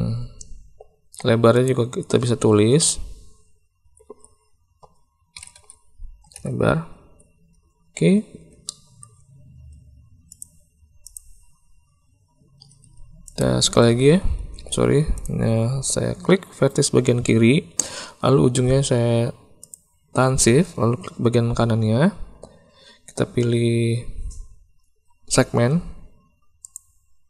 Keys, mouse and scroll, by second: 1.6-7.9 drag, 8.6 shift+middle click, 10.3 click, 11.0 click, 13.2 ctrl+click, 14.5 alt+a, 26.6 click.